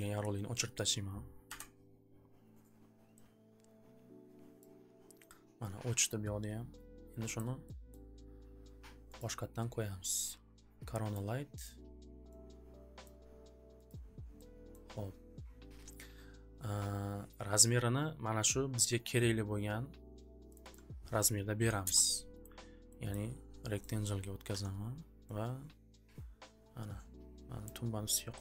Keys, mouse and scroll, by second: 1.4 Delete, 2.7 click, 4.6 click, 6.8 click, 6.8 click, 7.9 scroll, 9.1 click, 10.2 click, 11.2 click, 11.6 click, 13.0 click, 13.8 click, 14.7 scroll, 17.7 scroll, 19.0 scroll, 20.5 click, 20.7 click, 21.5 2, 21.8 Return, 22.4 click, 23.1 click, 24.0 scroll, 24.5 4, 25.9 scroll, 27.6 click.